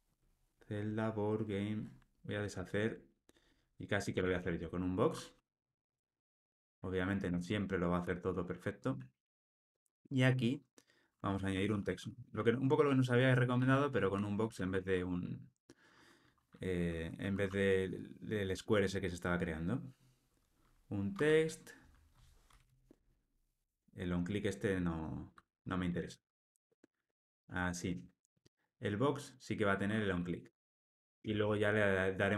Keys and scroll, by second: 2.3 super+z, 6.5 Return, 14.5 Return, 23.6 Tab, 27.4 alt+super+l, 27.8 ctrl+alt+o.